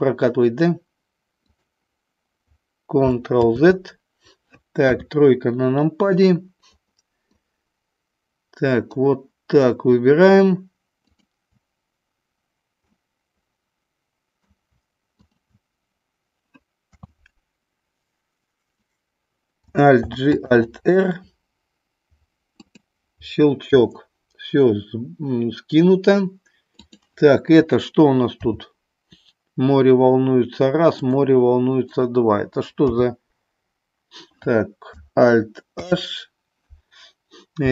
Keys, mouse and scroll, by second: 1.5 click, 3.3 ctrl+z, 4.7 KP_3, 7.3-9.0 drag, 11.0-12.1 shift+drag, 13.0-14.5 middle drag, 15.2 shift+click, 16.8 KP_3, 19.8 alt+g, 20.5 alt+r, 22.6 click, 26.7 click, 28.3 r, 31.7 click, 32.9 h, 35.7 alt+h, 37.6 g.